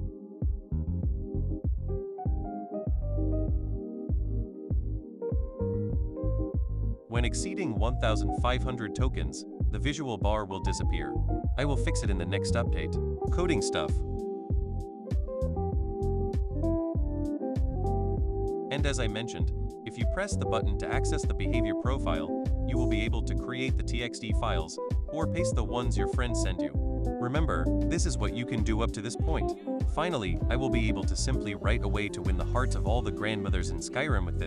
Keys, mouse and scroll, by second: 1.2 click, 2.2 click, 3.6-4.7 drag, 5.8-7.4 drag, 14.6 click, 17.6 click, 20.4 click, 24.5 click, 24.7 click, 26.2-27.7 drag, 28.7-30.2 drag, 30.5 click, 32.6 click, 33.7 right click.